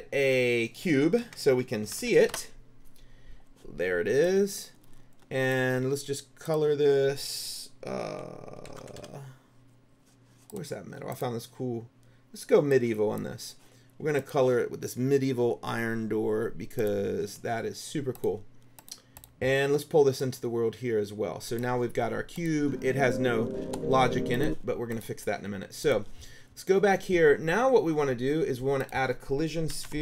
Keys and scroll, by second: 1.1-2.6 typing, 8.6-9.6 typing, 29.6-30.0 typing.